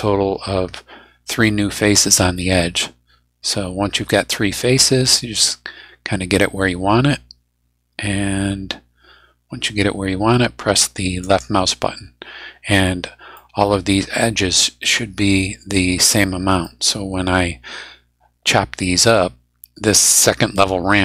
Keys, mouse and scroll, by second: 11.2 click, 13.3-15.9 middle drag, 16.6-19.3 middle drag.